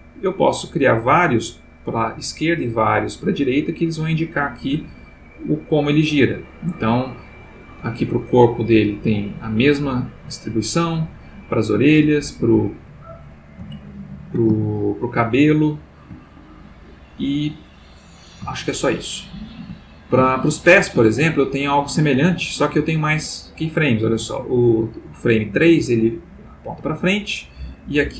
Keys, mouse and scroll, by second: 2.6-7.0 drag, 7.4 click, 8.6-10.5 drag, 11.5 click, 12.3 click, 13.8-14.5 ctrl+middle drag, 14.7-16.0 ctrl+shift+middle drag, 16.8 click, 18.5-19.1 shift+middle drag, 19.2-19.7 shift+middle drag, 20.3-20.8 shift+middle drag, 21.4 shift+click, 26.8-28.1 drag.